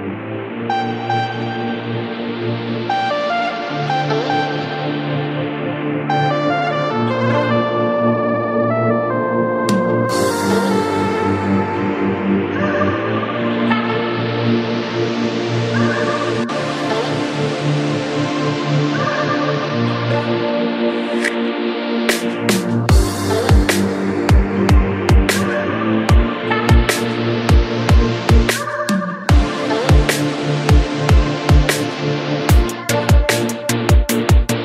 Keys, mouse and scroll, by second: 10.5-27.9 scroll down 1, 27.9-28.7 scroll down 1, 28.7-29.7 scroll down 1, 29.7-34.6 scroll down 1.